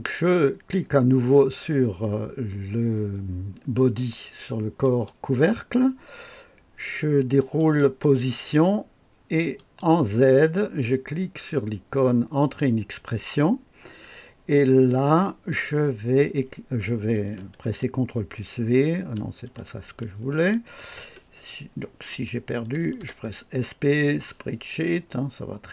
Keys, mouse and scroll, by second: 4.7 click, 7.5 click, 7.9 click, 9.5 click, 12.3 click, 18.1 ctrl+v, 20.3 ctrl+z, 22.4-23.4 typing.